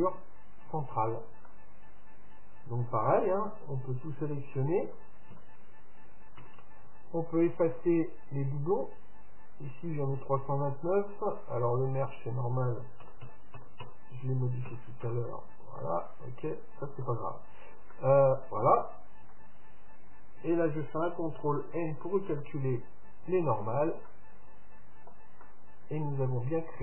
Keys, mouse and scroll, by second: 0.2 middle click, 0.4 middle click, 0.6 middle click, 1.5-3.4 middle drag, 3.5 Tab, 4.9 a, 5.4 a, 6.4 w, 8.5 a, 8.5 w, 12.2-13.8 drag, 13.8 KP_0, 17.1 Tab, 17.6-22.4 middle drag, 19.3 Tab, 21.6 ctrl+n, 23.3 Tab, 24.1 middle click, 24.9 middle click.